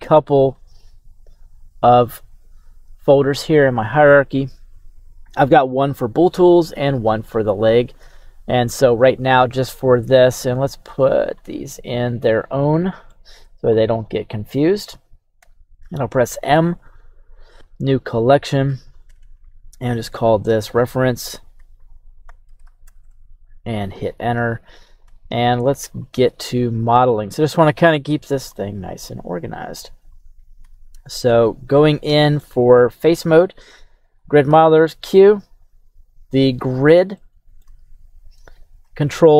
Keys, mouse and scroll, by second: 6.9-11.4 drag, 11.9 right click, 12.4-12.8 scroll down 4, 12.8-13.1 middle drag, 13.3-13.6 scroll down 1, 13.7-14.1 drag, 15.4 m, 19.2 BackSpace, 19.3 BackSpace, 23.0 Return, 24.0 right click, 25.0 KP_3, 25.9-26.9 scroll up 5, 28.5-29.1 shift+middle drag, 29.4 right click, 30.2-30.6 scroll up 1, 30.6 Tab, 31.1 right click, 31.8-32.1 scroll up 1, 32.4 shift+middle click, 34.4 q, 37.2-39.3 shift+middle drag, 37.8 scroll up 2, 38.6 scroll up 1.